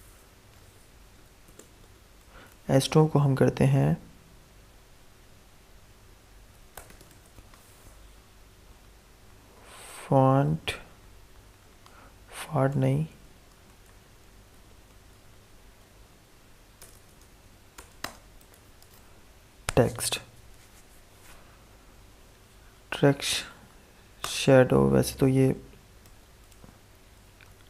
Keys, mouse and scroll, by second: 0.2-1.4 typing, 1.7 Return, 6.4-7.5 typing, 9.1 Down, 12.6 Left, 13.3 Up, 13.8 Left, 14.6 Right, 16.7 BackSpace, 17.9-19.3 typing, 21.2 typing, 23.1 Down, 24.1 Return, 25.6-27.6 typing.